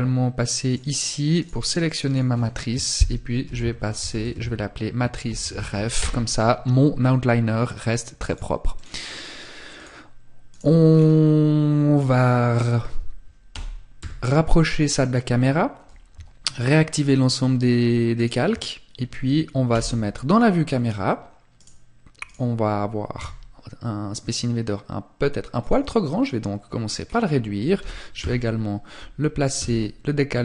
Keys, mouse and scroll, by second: 0.5 right click, 1.3 click, 7.4 click, 7.9 click, 8.9 click, 9.7 right click, 10.1-10.5 scroll down 3, 10.9 scroll down 1, 11.1 middle click, 12.7 g, 14.0 click, 17.3 shift+click, 18.9 KP_0, 20.0 scroll down 1, 20.7 right click, 22.3 s, 24.9 click, 25.7 scroll up 1, 26.2 scroll down 1.